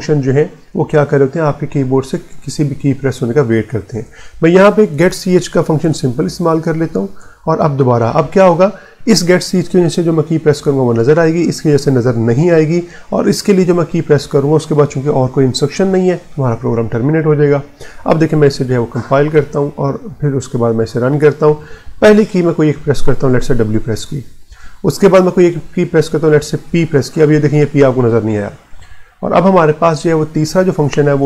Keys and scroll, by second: 3.7 Return, 4.4-7.1 typing, 18.4 alt+F9, 19.2 Return, 20.0 ctrl+F9, 23.3 w, 26.5 p.